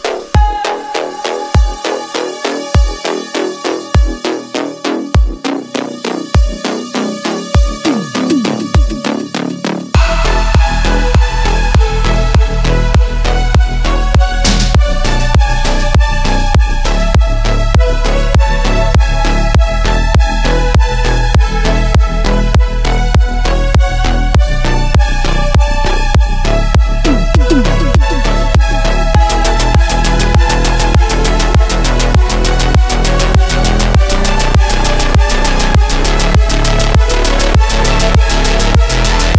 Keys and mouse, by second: 0.6 shift+click, 2.7 shift+click, 4.7 a, 6.1 e, 8.0 s, 11.5 click, 11.5 middle click, 11.5 right click, 12.5 shift+middle click, 13.7 2, 15.2 g, 18.2 shift+middle click, 18.7 middle click, 19.4 shift+middle click, 21.2 click, 22.1 shift+middle click, 24.2 Tab, 26.9-27.9 middle drag, 28.7-29.0 shift+drag, 28.7-29.0 shift+middle drag, 28.7-29.0 shift+right drag, 30.2 ctrl+a, 30.8 Tab, 33.0 a, 35.3 3, 36.5 Tab, 38.0-39.3 drag.